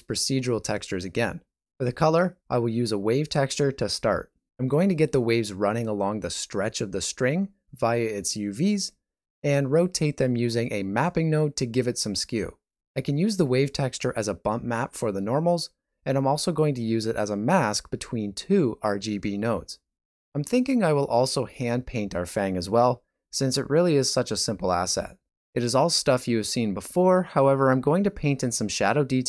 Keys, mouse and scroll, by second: 12.7 typing.